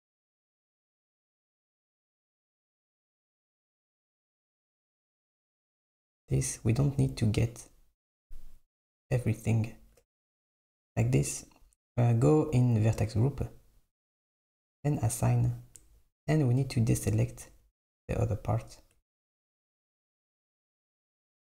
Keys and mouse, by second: 2.3 super+click, 2.8 super+middle click, 3.7 shift+click, 3.8 middle click, 4.2 shift+click, 4.3 middle click, 4.8 shift+click, 5.5 middle click, 6.0 shift+click, 6.7 middle click, 8.2 shift+click, 9.0 shift+click, 11.5 click, 15.3-16.4 drag, 16.4 Tab, 17.9 Tab, 19.6 Tab.